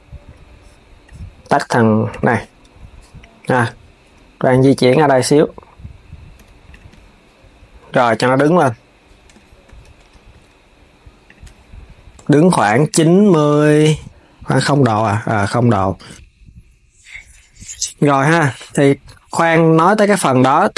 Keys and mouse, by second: 2.5 KP_1, 4.3 g, 7.7 KP_1, 9.5 KP_1, 10.0 r, 12.6 click, 13.6-15.3 drag, 15.5 s.